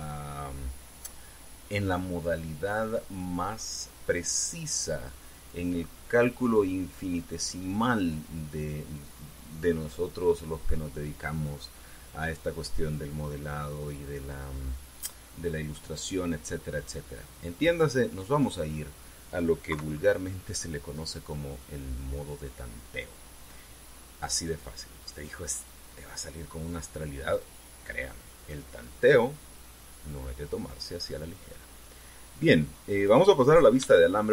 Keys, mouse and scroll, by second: 18.5-19.9 middle drag, 20.5 KP_3, 22.7-25.1 drag, 26.7-30.7 drag, 32.2-34.0 drag, 34.2-34.3 scroll up 3.